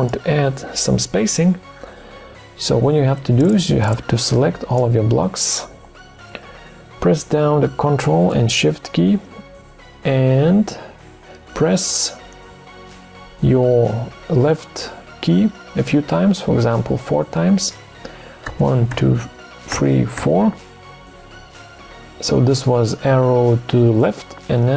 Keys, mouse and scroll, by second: 18.5 ctrl+shift+Left.